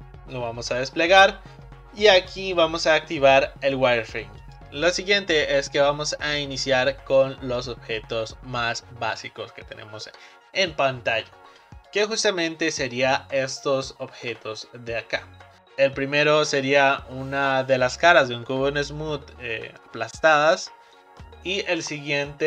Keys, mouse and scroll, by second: 11.9 click, 13.4-13.7 scroll up 1, 13.7-14.4 shift+middle drag, 14.4 scroll up 2, 15.1-15.6 scroll up 2, 21.9-22.4 middle drag.